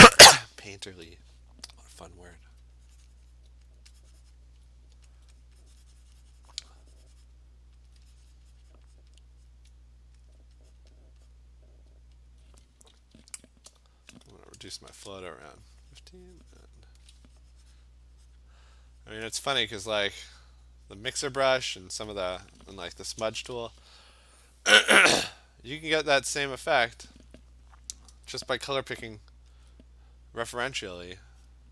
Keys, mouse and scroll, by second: 2.5-2.8 alt+click, 3.4 click, 3.8 alt+click, 4.4 click, 5.2 alt+click, 5.5 click, 6.3 click, 6.6 alt+click, 7.3 click, 7.9-9.1 alt+click, 8.3 click, 8.4 click, 8.6 click, 8.8 click, 8.9 alt+click, 9.0 click, 9.5 click, 10.2 alt+click, 10.3 alt+click, 10.8 click, 11.0 click, 11.4 click, 12.3 alt+click, 13.2 ], 13.3 ], 14.9 shift+1, 16.7 click, 16.9 click, 16.9 alt+click, 17.4 !, 18.4 click, 18.8 click, 19.1 click, 21.3 click, 23.3 [, 23.5 [, 23.6 [, 25.9 click, 26.4 click, 27.0 click, 29.7 alt+click, 29.8 alt+click, 30.3 click, 30.5 click, 30.9 click, 31.0 click, 31.5 click.